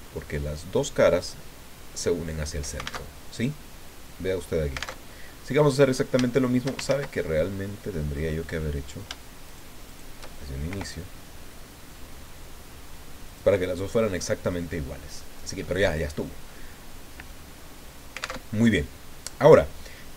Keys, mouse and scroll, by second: 1.1 click, 3.0 alt+Tab, 5.0 alt+Tab, 5.2 alt+click, 6.2 shift+click, 6.5 shift+scroll up 1, 6.9 ctrl+shift+z, 7.2-8.3 ctrl+shift+drag, 8.4 click, 9.4 shift+right click, 9.9 shift+right click, 10.7 i, 13.3 click, 13.6-15.3 middle drag, 15.6 middle click, 18.4 alt+Tab.